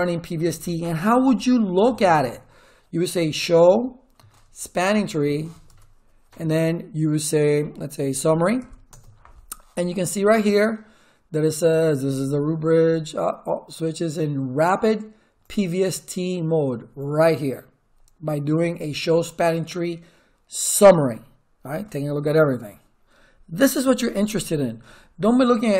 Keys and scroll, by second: 1.3 ctrl+z, 1.8 Return, 2.8-6.3 typing, 8.0-8.9 typing.